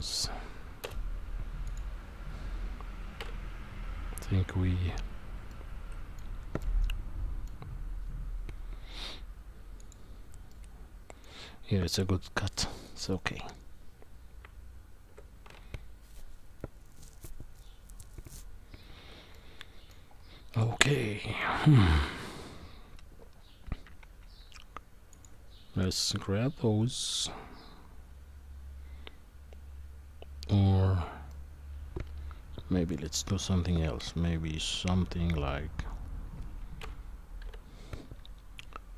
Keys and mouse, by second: 0.8 Delete, 5.5 middle click, 6.7 middle click, 10.5 middle click, 14.4 Tab, 19.3-19.9 middle drag, 20.9-21.4 middle drag, 31.3-32.9 middle drag, 36.8 KP_1, 37.4 KP_9.